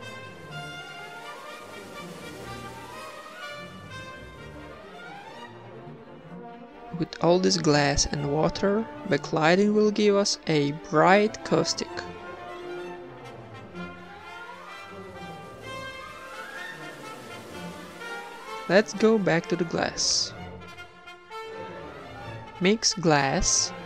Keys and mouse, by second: 0.4 click, 2.9 s, 4.4 Tab, 4.7 ctrl+r, 5.0 ctrl+r, 5.5 ctrl+Tab, 5.5 a, 5.7 click, 6.2 Tab, 6.4 ctrl+b, 7.2 x, 7.6 Tab, 7.8 ctrl+s, 9.2 ctrl+s, 11.1 ctrl+s, 12.2 ctrl+s, 13.1 shift+a, 13.9 click, 14.9 g, 15.4 g, 15.4 r, 16.4 g, 17.1 click, 18.7 g, 20.0 click, 20.8 ctrl+s, 22.9-23.8 drag.